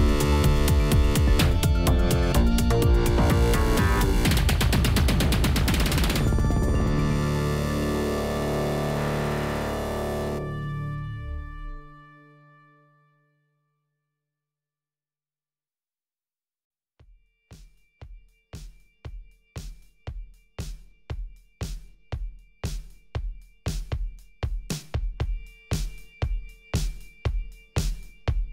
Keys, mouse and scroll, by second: 1.5 s, 2.6 shift+middle click, 2.9 g, 3.8 click, 4.2 shift+d, 4.6 s, 5.7 s, 7.8 s, 9.3 s, 10.2 g, 10.9 ctrl+a, 11.6 click, 11.6 ctrl+a, 12.0-12.9 scroll down 3, 12.9 shift+click, 13.0 g, 13.9 click, 14.3 g, 15.8 click, 16.0 g, 16.9 shift+middle click, 17.3 click, 17.4 g, 18.4 click, 18.6 g, 19.7 click, 21.3 g, 22.9-25.9 shift+middle drag, 26.9-27.6 middle drag, 27.6-28.3 scroll up 2, 28.3-28.5 shift+middle drag.